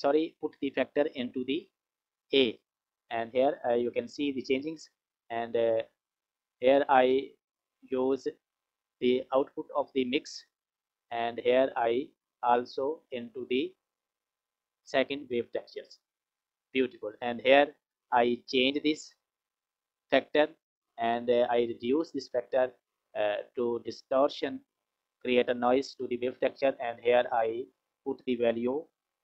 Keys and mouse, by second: 0.6 click, 0.8-2.0 drag, 3.9 click, 5.1 click, 7.6 click, 8.5 click, 8.7-10.0 drag, 10.9 click, 11.1 click, 12.3 click, 13.9-15.6 drag, 17.1 click, 18.4-26.3 drag, 27.9-29.2 drag.